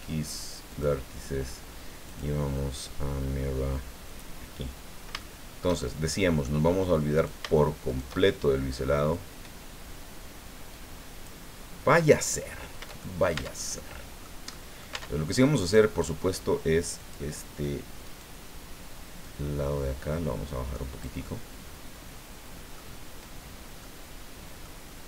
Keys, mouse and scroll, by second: 0.7 click, 2.0 click, 4.0 click, 4.8-5.2 scroll down 1, 5.2-6.6 shift+middle drag, 7.1-8.2 shift+right drag, 9.1-11.4 drag, 12.2 click, 13.0 shift+middle click, 13.4 shift+Tab, 13.7 shift+middle click, 14.5 middle click, 14.9 Tab, 15.6 right click, 17.0 click, 18.0 right click, 19.2-21.2 drag, 21.2-22.9 middle drag, 23.8-24.8 middle drag.